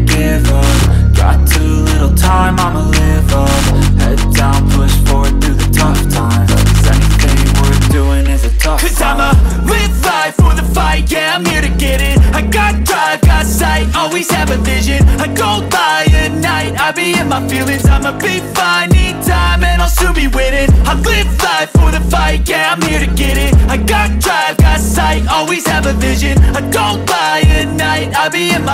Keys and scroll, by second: 3.1 shift+Page_Up, 4.7 Delete, 5.5 F2, 15.9 Escape, 17.8 Escape, 26.7 F3, 27.0 Escape.